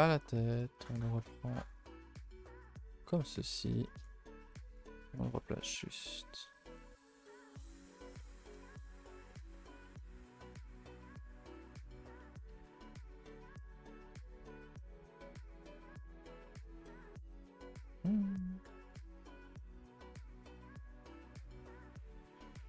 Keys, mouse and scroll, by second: 1.8 shift+middle click, 2.6 shift+middle click, 2.8 scroll up 1, 2.9 middle click, 3.5-4.4 scroll up 13, 3.8 shift+middle click, 4.4-6.1 middle drag, 6.1-6.4 scroll up 2, 6.4 middle click, 6.9 r, 7.4 g, 8.1 middle click, 9.0 scroll up 2, 9.2 shift+middle click, 9.9 r, 11.1 g, 12.1 middle click, 13.0 g, 14.9 r, 15.9 middle click, 16.8 Tab, 17.1 Tab, 17.2 middle click, 18.2-18.5 scroll up 1, 18.5 r, 19.7-20.3 middle drag, 20.3 Tab, 20.5-22.5 middle drag, 22.5 Tab.